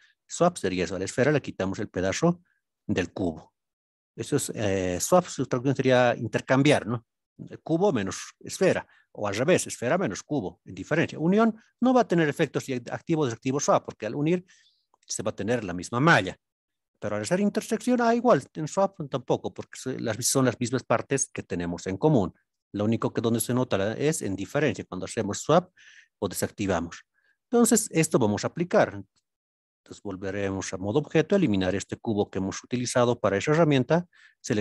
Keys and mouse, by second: 0.6-1.2 middle drag, 1.8-2.8 middle drag, 3.2-4.0 middle drag, 13.7-14.7 middle drag, 27.5-28.0 middle drag, 29.6 Tab, 31.3 x, 32.6-33.2 shift+middle drag, 33.6 drag.